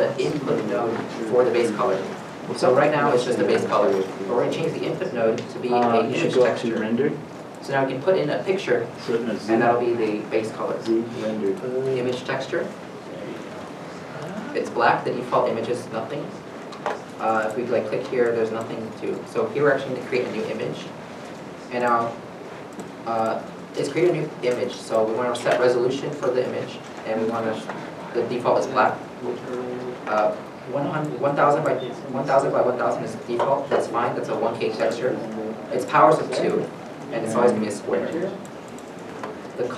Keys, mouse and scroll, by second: 13.8 middle click, 14.6 shift+middle click, 15.7 middle click.